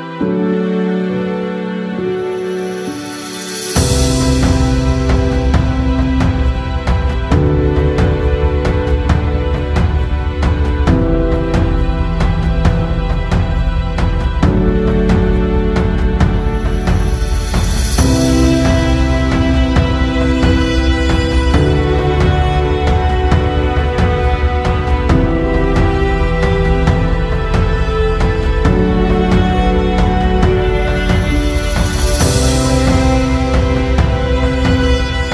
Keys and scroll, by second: 4.7 Tab, 4.8 Tab, 7.0 Tab, 10.7 e, 11.3 y, 12.4 g, 12.6 y, 14.1 Tab, 14.7 ctrl+z, 16.7 s, 16.8 z, 18.7 p, 19.2 Tab, 22.3 g, 22.5 x, 22.9 Tab, 23.7 g, 23.9 x, 25.0 Tab, 28.3 Tab, 32.1 ctrl+z, 34.8 KP_0.